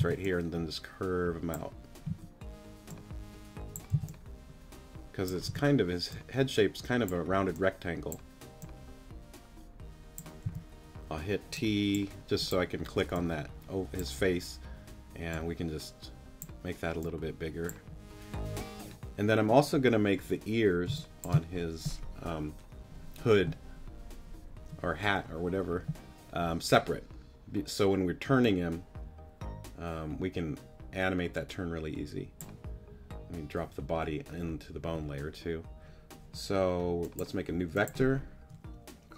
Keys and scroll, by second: 0.0 c, 2.1 a, 3.9 c, 5.5 t, 10.4 t, 20.9 space.